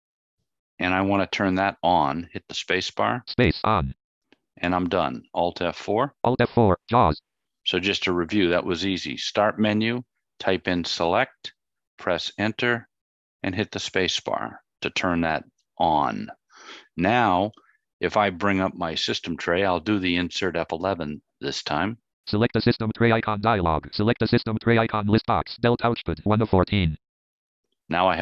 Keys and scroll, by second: 2.1 space, 5.2 alt+F4, 19.8 F11.